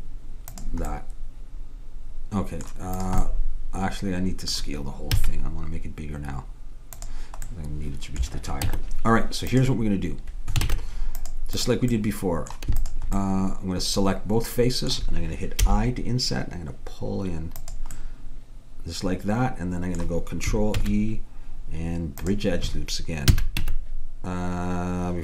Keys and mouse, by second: 3.1-4.7 drag, 5.2 s, 8.7 Tab, 10.7 ctrl+Tab, 15.6 i, 18.0-19.3 middle drag, 20.8 ctrl+e, 23.3 a, 23.6 Tab.